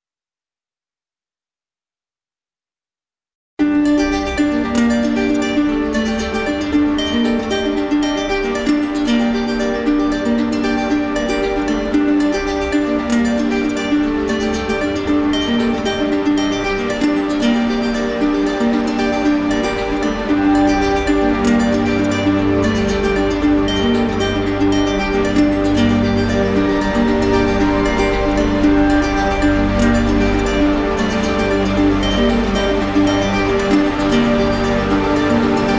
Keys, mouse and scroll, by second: 2.3 shift+click, 3.0 shift+click, 3.8 shift+click, 4.8 shift+click, 6.9 d, 7.4 d, 12.1 shift+click, 14.4 z, 15.3 click, 17.1 click, 18.6 middle click, 23.1 click, 23.3 ctrl+z.